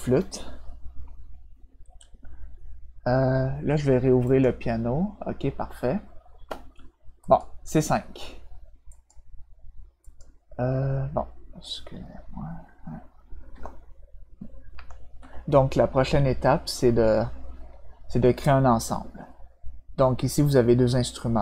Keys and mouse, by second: 4.2 click, 7.2 click, 8.9 click, 10.0 click, 14.7 ctrl+F7.